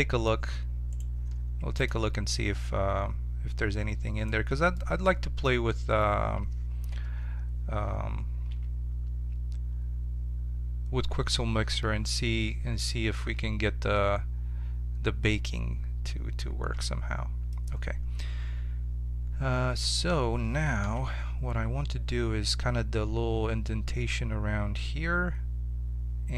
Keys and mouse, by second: 0.9-2.1 right drag, 1.8 click, 2.7 click, 3.4 right click, 6.8 KP_7, 8.4 z, 15.4-17.2 middle drag, 20.8 KP_7.